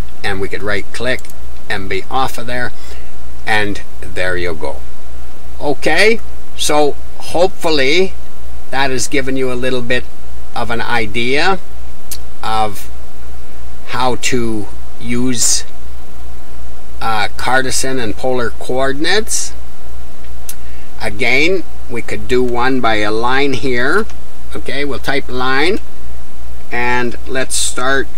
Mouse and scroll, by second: 0.0 click, 1.8-28.1 middle drag.